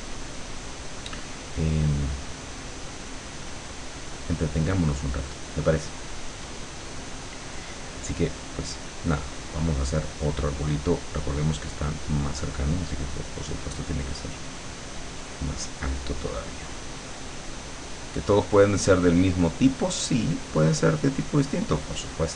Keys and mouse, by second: 8.9 click, 9.2 click, 10.1-13.6 drag, 14.1 click, 16.5-22.3 drag.